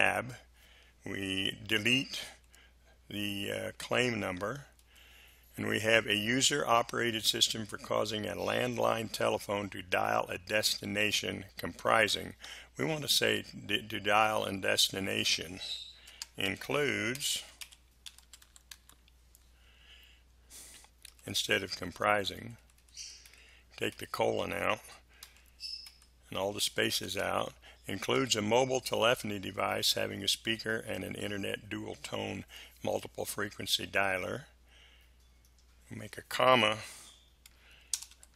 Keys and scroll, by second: 2.3 Delete, 16.0-19.2 typing, 21.1 Delete, 23.3 Delete, 25.2 Delete, 27.0 space, 37.9 BackSpace, 38.1 ,.